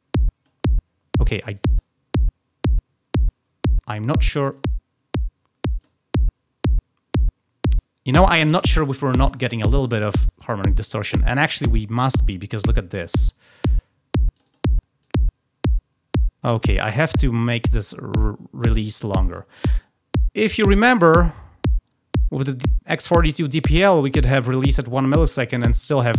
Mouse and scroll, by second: 1.5 click, 1.7 click, 4.4 click, 5.7 click, 14.3 click, 15.0-16.6 drag, 16.9-18.7 drag.